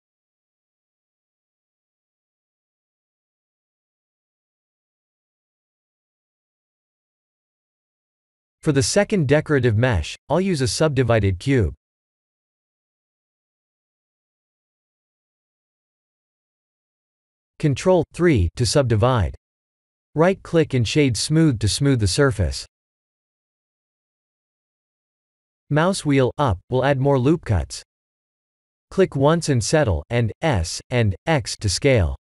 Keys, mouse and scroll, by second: 1.8 click, 4.0 click, 5.4 click, 5.8 middle click, 9.0 scroll up 1, 9.4 KP_1, 10.4 click, 11.0 shift+a, 18.3 ctrl+3, 19.9 shift+middle click, 21.0 Tab, 21.3-22.4 scroll up 5, 22.5 ctrl+r, 26.7 KP_3, 28.2 ctrl+r, 31.5 Tab.